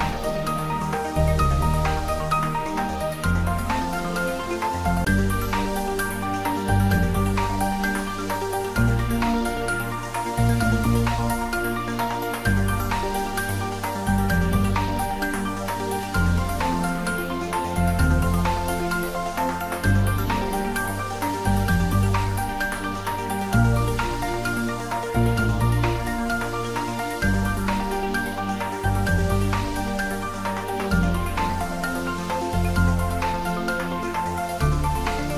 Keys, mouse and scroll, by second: 2.2 g, 2.4 y, 6.5 click, 7.3 Tab, 8.2 click, 8.7-9.1 scroll down 1, 9.1-10.4 middle drag, 10.4 click, 11.9 click, 12.3-12.7 scroll up 1, 13.3 middle click, 14.3 scroll down 1, 14.7 middle click, 15.7 scroll up 1, 17.5 ctrl+3, 18.4 middle click, 19.2-20.7 scroll down 1, 20.7-22.4 middle drag, 22.4-22.9 scroll up 1, 23.0 scroll up 1, 23.2 Tab, 24.3 ctrl+r, 25.2 click, 27.9 ctrl+r, 29.7 click, 31.9-32.3 scroll up 1, 32.3 middle click, 32.6 middle click, 34.4 3, 35.2 scroll down 1.